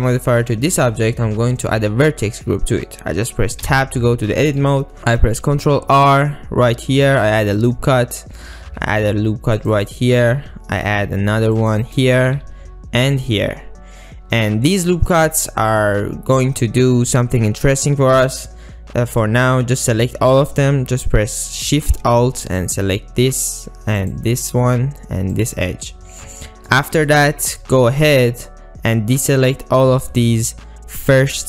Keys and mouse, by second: 3.7 Tab, 4.1 click, 5.0 ctrl+r, 5.7 ctrl+r, 8.3 click, 8.6 ctrl+r, 10.3 ctrl+r, 11.9 click, 12.5 ctrl+r, 22.7 alt+shift+click, 24.1 alt+shift+click, 26.3 shift+middle click, 27.4 shift+middle click, 27.9 ctrl+middle click.